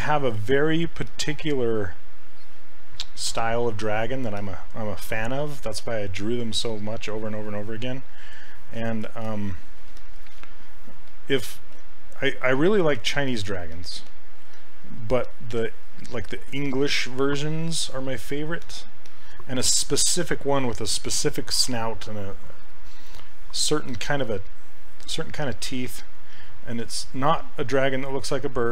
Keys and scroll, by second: 11.1 s, 11.8 s.